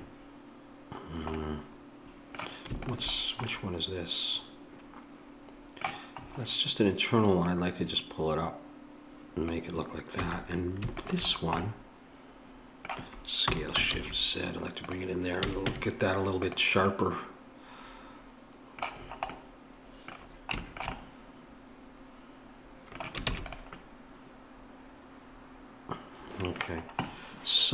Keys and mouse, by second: 2.8-9.5 drag, 10.2 a, 11.0-13.5 drag, 13.5 s, 15.4 a, 15.7 Tab, 23.2 ctrl+s.